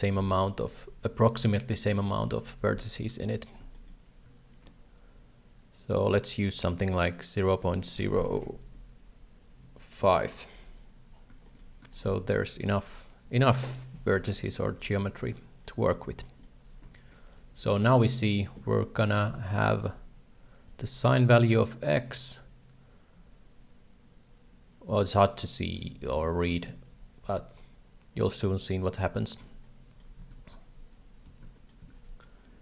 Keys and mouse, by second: 2.6 shift+z, 3.2 shift+middle click, 3.7 shift+middle click, 5.0-6.4 shift+drag, 6.8-10.6 drag, 11.4 shift+middle click, 11.9 shift+middle click, 14.2 shift+z, 14.7 shift+middle click, 15.8 shift+middle click, 16.4 shift+middle click, 20.5 right click, 20.6 g, 29.8 shift+middle click, 30.2 shift+a, 31.1 click, 31.4 x, 31.6 shift+middle click, 31.8 shift+a.